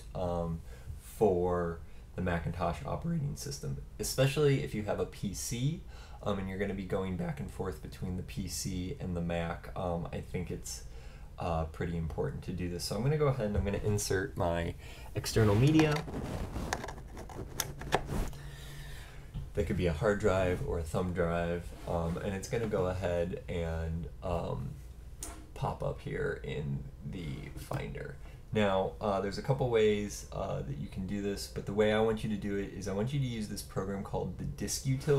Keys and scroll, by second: 0.3 typing, 3.3-3.8 typing, 5.6-6.5 typing, 10.0-10.7 typing, 14.2-15.1 typing, 19.6 typing, 21.2 typing.